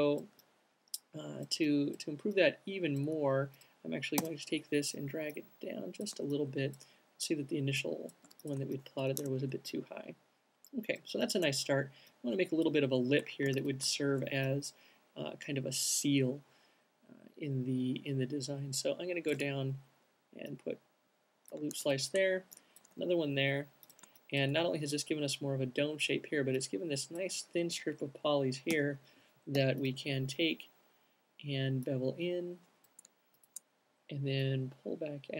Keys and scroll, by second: 3.7 w, 7.6 q, 9.6 Tab, 13.8 c, 19.7 q, 20.7 alt+c, 23.2 q, 29.1 l, 29.9 b.